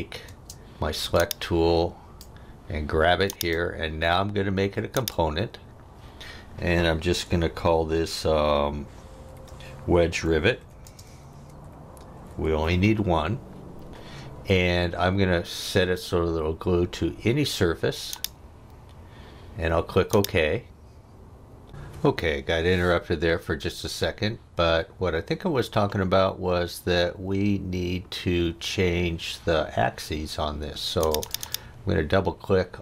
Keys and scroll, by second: 0.2 space, 9.0-13.1 typing.